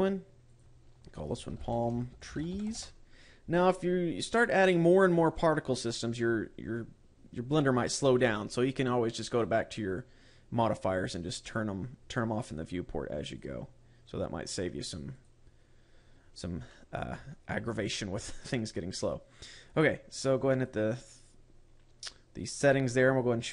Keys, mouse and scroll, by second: 0.2 click, 1.0 click, 9.8 click, 13.0 click, 13.8 click, 15.7 click, 17.2 middle click, 18.4 shift+middle click, 18.8 middle click, 21.0 click.